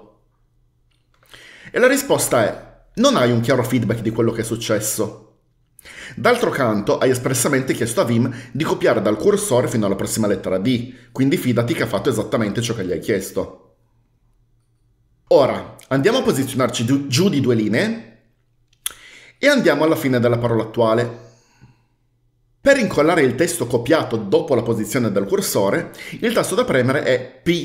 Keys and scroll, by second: 17.8 typing, 20.4 typing.